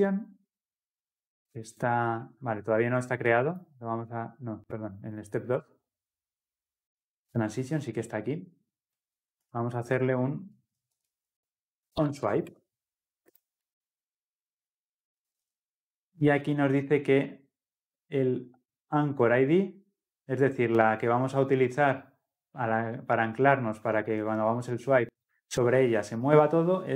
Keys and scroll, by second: 12.6 Return.